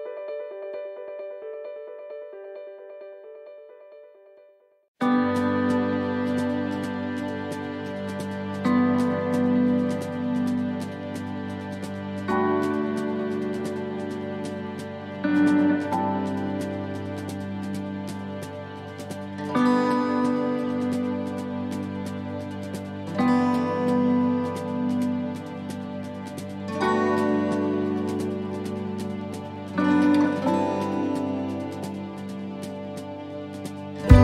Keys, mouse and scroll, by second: 0.2 middle click, 1.9 alt+shift+right click, 2.5 alt+shift+right click, 4.9 alt+shift+right click, 5.2 middle click, 7.2 alt+shift+right click, 8.1 alt+shift+right click, 8.8 middle click, 9.4 scroll down 2, 10.1 middle click, 13.1 alt+shift+right click, 15.9 alt+shift+right click, 16.3 shift+middle click, 18.2 alt+shift+right click, 19.3 alt+shift+right click, 21.5 alt+shift+right click, 22.0 middle click, 24.1 alt+shift+right click, 25.0 alt+shift+right click, 28.0 alt+shift+right click, 32.2 alt+shift+right click, 32.4 middle click.